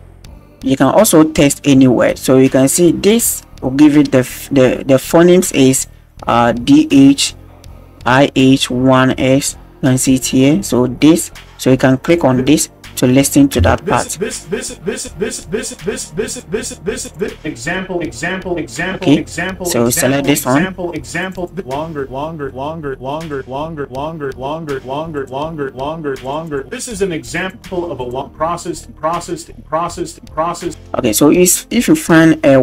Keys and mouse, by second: 12.0 middle click, 13.6 space, 16.2 click, 17.0 click, 21.2 click, 22.5 middle click, 22.8 click, 23.3 click, 23.4 middle click, 26.2 click, 26.4 click, 27.2 click, 28.0 click, 30.7 space.